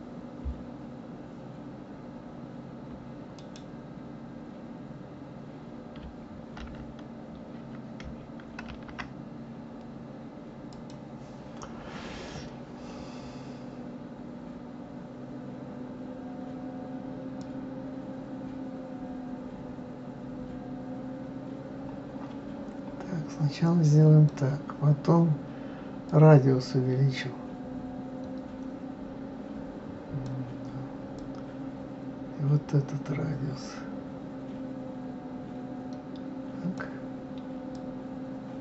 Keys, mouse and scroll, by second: 8.7 shift+a, 17.4-20.5 drag, 26.1-29.1 drag, 31.2-34.2 drag, 37.7-38.6 drag.